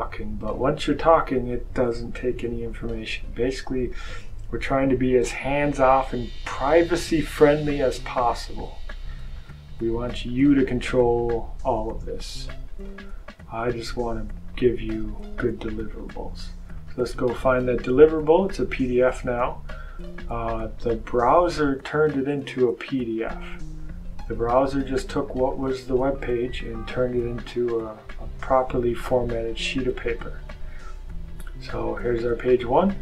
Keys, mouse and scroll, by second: 9.3 click, 12.8 click, 16.6 click, 18.1 click, 18.5 click, 21.4 click, 25.4 click, 27.4 click, 32.4 click.